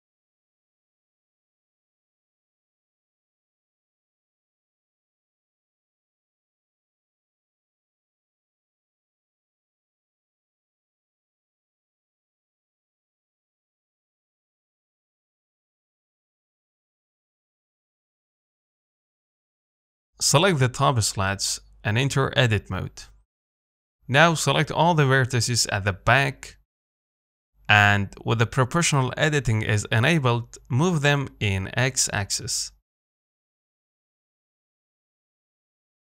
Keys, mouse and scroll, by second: 3.1 g, 5.2 Tab, 5.4-5.7 scroll down 1, 5.7 middle click, 5.9 scroll up 3, 6.2 shift+middle click, 6.8 click, 7.5 shift+middle click, 7.7-8.3 scroll up 2, 8.3 click, 8.5-8.8 scroll down 2, 8.8 middle click, 9.0-9.5 scroll up 3, 10.9 g, 12.4 s, 13.2-13.7 scroll down 3, 13.5 middle click, 13.9-14.9 scroll up 3, 14.2 shift+middle click, 14.9-16.4 shift+middle drag, 16.4-17.8 scroll down 2, 17.8-18.3 scroll down 1, 18.3 middle click, 19.0-19.7 scroll up 3, 19.7 middle click, 20.5 click, 21.2 shift+click, 22.0 shift+click, 22.4 shift+click, 22.7 Tab, 23.2 z, 23.4-24.8 middle drag, 24.8 KP_7, 27.0 click, 27.5 scroll down 2, 27.7-29.4 shift+middle drag, 29.4 click, 30.2 g, 32.5 o, 34.0 g.